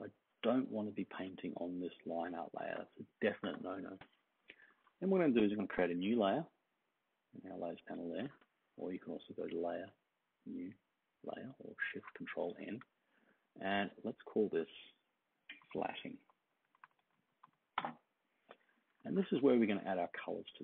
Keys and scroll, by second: 15.3-17.9 typing.